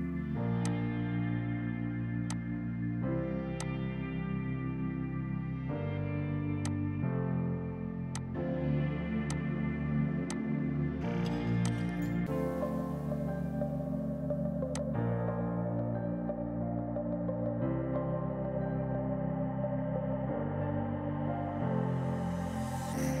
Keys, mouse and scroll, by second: 0.7 click, 1.3 space, 2.3 click, 6.6 click, 9.6 space, 10.3 click, 10.7 F3, 11.5 F2, 11.7 click, 13.9 F4, 14.7 click, 15.9 ctrl+right click, 16.8 F8, 17.3 Page_Up, 18.5-20.6 typing.